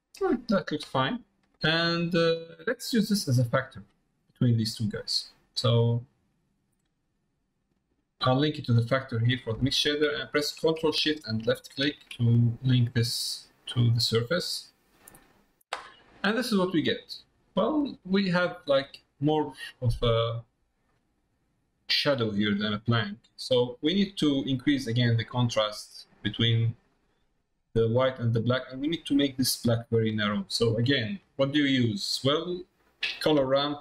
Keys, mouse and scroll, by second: 1.1 middle click, 1.6 middle click, 2.4 middle click, 3.8 middle click, 6.3-7.7 drag, 11.4 ctrl+shift+click, 16.2 middle click, 17.5 middle click, 18.6 middle click, 19.7 middle click, 20.9 middle click, 21.5 middle click, 22.4 middle click, 24.1 middle click, 25.1 click, 26.2-27.2 drag, 27.7 click, 30.8 middle click.